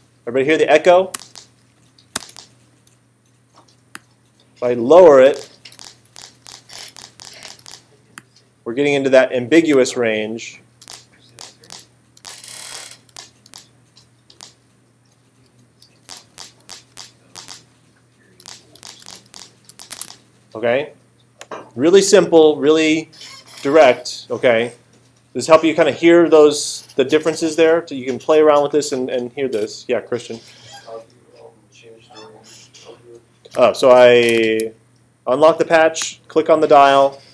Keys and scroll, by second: 1.2 space, 5.3 space, 10.8 space, 16.0 space.